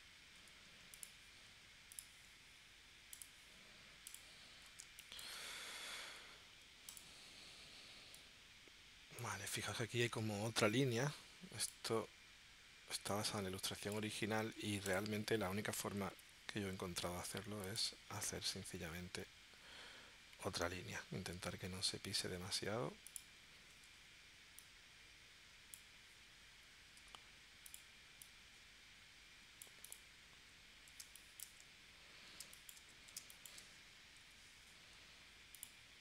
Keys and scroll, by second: 0.4 a, 4.8 space, 6.1 a, 16.1 p, 23.9 shift+c, 27.0 a, 31.0 space, 32.5 space, 33.2 space, 34.2 p.